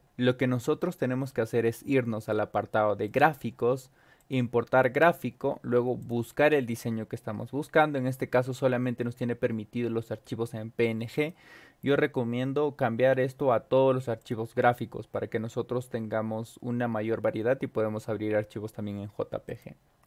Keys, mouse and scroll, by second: 3.0 click, 4.1 click, 6.0 click, 11.1 click, 14.2 click, 19.4 click.